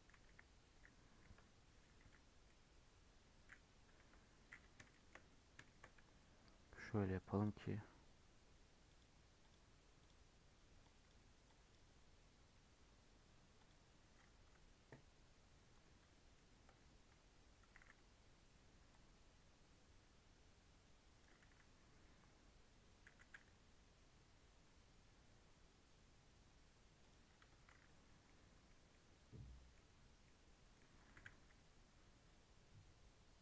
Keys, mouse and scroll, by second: 0.2 KP_1, 1.2 KP_7, 2.4-4.0 middle drag, 4.0 KP_7, 4.9 shift+middle click, 5.1 scroll down 2, 5.6 shift+middle click, 5.9 Tab, 6.2-7.3 scroll up 1, 7.3-10.5 drag, 15.8 Tab, 16.6 1, 17.7 alt+z, 18.9 click, 23.0 g, 27.4 Tab, 27.7 alt+z, 28.1 scroll down 1, 28.2 middle click, 28.7 scroll up 2, 28.9-29.9 middle drag, 29.9 Tab, 30.2 middle click, 31.0 g.